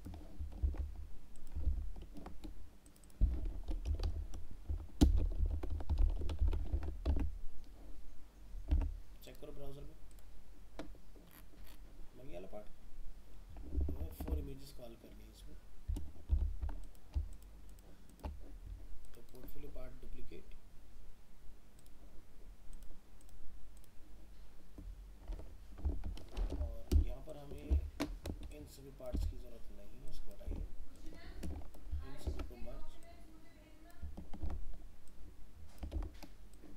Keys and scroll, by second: 0.6 ctrl+c, 1.6 ctrl+v, 6.7 ctrl+s, 7.2 alt+Tab, 14.0 alt+Tab, 26.4 ctrl+alt+0, 32.2 ctrl+e.